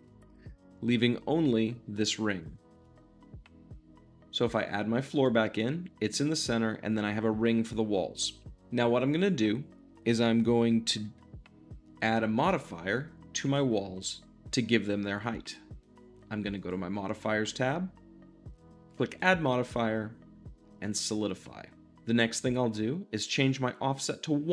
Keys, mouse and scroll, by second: 0.0 click, 0.4-2.7 shift+middle drag, 2.7 Tab, 5.1-24.5 drag.